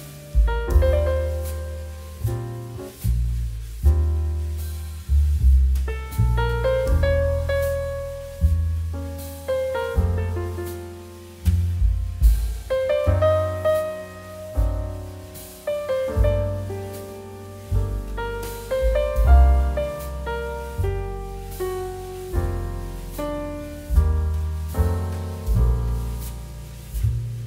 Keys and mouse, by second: 1.6 click, 2.5 shift+middle click, 3.4 shift+middle click, 4.5 click, 6.9 ctrl+z, 7.3 click, 10.9 click, 11.5 middle click, 11.9 shift+middle click, 12.4 click, 16.2 shift+middle click, 16.5 middle click, 18.5 click.